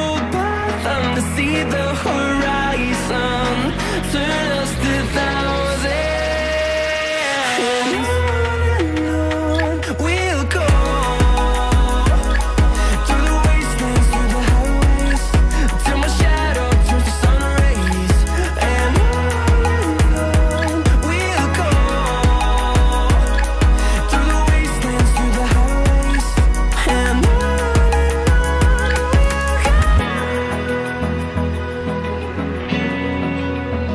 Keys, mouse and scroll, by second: 3.7 shift+middle click, 6.2 scroll up 2, 7.9 scroll up 1, 7.9 ctrl+z, 12.8 double click, 23.0 shift+middle click, 26.8 double click.